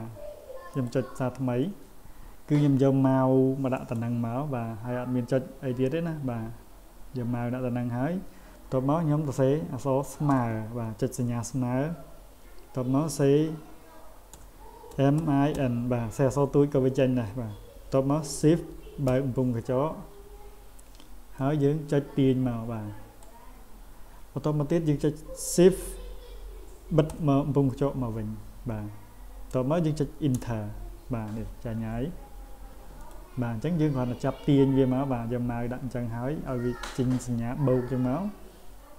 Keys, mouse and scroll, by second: 0.7 click, 3.7 click, 21.4-23.2 drag, 33.0 click.